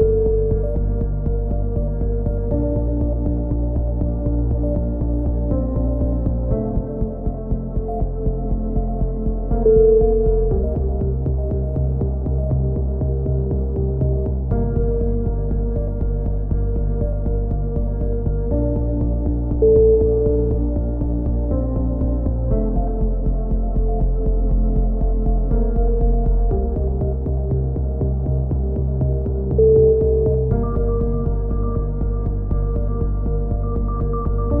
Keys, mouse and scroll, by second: 0.3 middle click, 1.0 a, 2.3 middle click, 4.0 KP_1, 4.5 z, 5.7 middle click, 6.7 z, 6.9 z, 8.3 z, 8.7 click, 11.4 ctrl+KP_7, 11.8 z, 12.2-13.6 middle drag, 15.0 KP_3, 16.4 click, 17.4-18.7 middle drag, 17.4 z, 18.8 click, 20.7-22.2 drag, 22.0 ctrl+KP_7, 22.2 middle click, 22.4 click, 23.3 middle click, 24.2 click, 25.0-26.0 middle drag, 25.0 z, 26.0-27.0 drag, 28.5 a, 28.8 z, 29.0 middle click, 29.1-30.1 drag, 31.9-33.9 drag, 32.9 middle click, 33.7-34.6 right drag, 34.5 f.